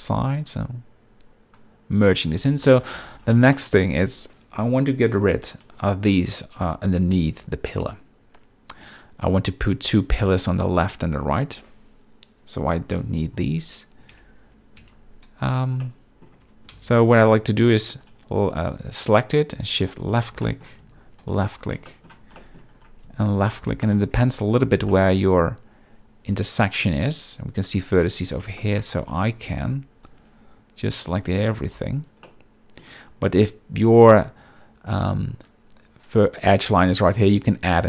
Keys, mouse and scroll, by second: 2.6-3.0 middle drag, 2.8 scroll, 3.5 shift+middle drag, 5.5 click, 14.1 Tab, 14.8 z, 15.8 middle click, 16.4 Tab, 16.7 z, 18.0 click, 20.0 shift+click, 20.4 shift+middle click, 21.2 shift+click, 21.9 shift+middle click, 22.4 middle click, 23.3 shift+click, 23.8 shift+middle click, 24.2 Tab, 24.9 shift+middle click, 25.2 z, 28.6 shift+middle click, 29.0 click, 29.3 b, 30.1 click, 32.2 middle click.